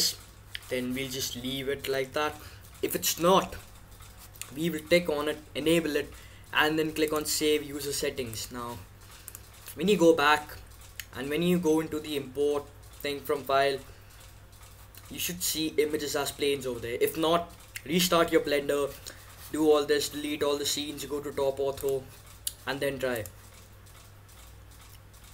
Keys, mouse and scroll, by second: 9.2-10.9 drag, 21.8-24.0 drag.